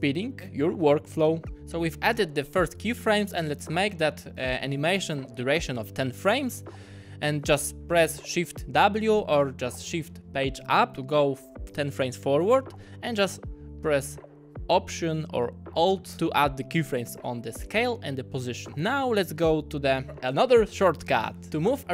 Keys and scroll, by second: 4.9 shift+w, 17.8 alt+s, 18.3 alt+p.